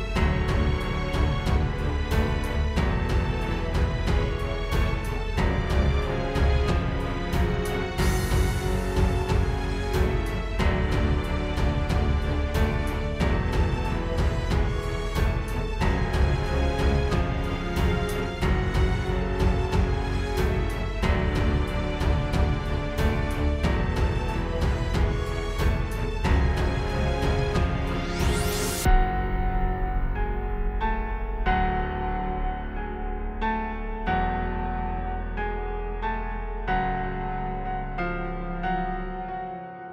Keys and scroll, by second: 4.0 super+z, 5.3 space, 11.8 shift+super+i, 13.1 space, 14.9 space, 15.3 super+s, 23.0 space, 23.4 space, 30.2 shift+super+i, 32.4 space, 39.1 space, 39.4 space.